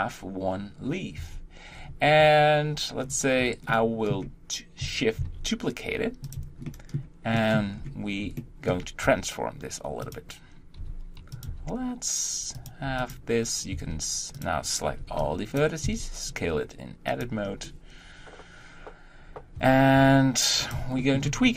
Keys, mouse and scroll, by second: 1.2 Tab, 1.7-2.2 scroll down 3, 3.0-3.4 scroll down 2, 3.7-5.2 shift+middle drag, 5.2 shift+d, 6.7-7.7 shift+middle drag, 7.7-8.4 scroll up 1, 8.4 shift+middle click, 9.0 r, 10.8 g, 11.5 r, 12.8 g, 19.6 Tab, 19.9 g, 21.0 shift+middle click, 21.3 scroll up 1.